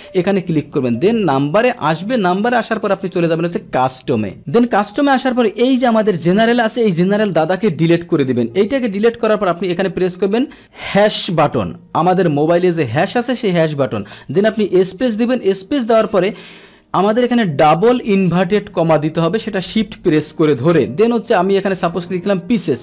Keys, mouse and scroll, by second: 1.6 click, 5.6-22.8 drag.